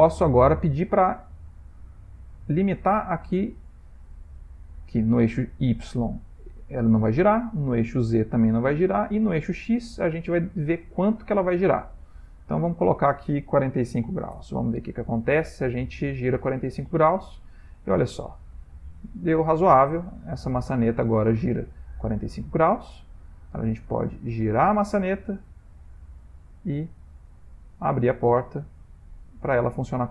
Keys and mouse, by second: 5.6 click, 7.8 click, 9.2 click, 10.0 ctrl+middle click, 10.6 shift+middle click, 11.0 ctrl+middle click, 11.2 middle click, 11.5 middle click, 11.6 middle click, 12.8 click, 15.5 r, 25.5 ctrl+middle click, 26.7 click, 27.1 r.